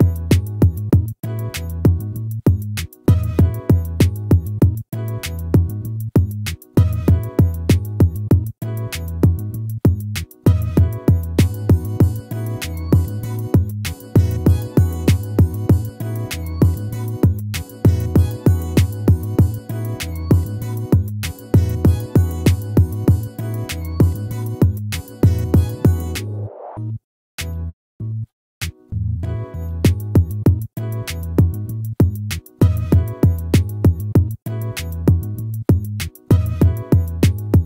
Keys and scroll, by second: 18.8 ctrl+z, 29.0 ctrl+-, 30.5 ctrl++, 34.4 ctrl+-, 36.5 ctrl+-.